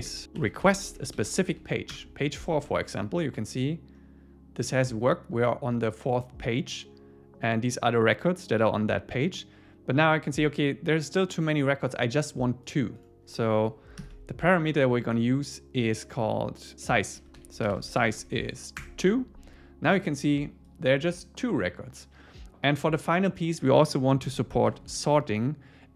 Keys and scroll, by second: 1.9 Return, 18.8 Return.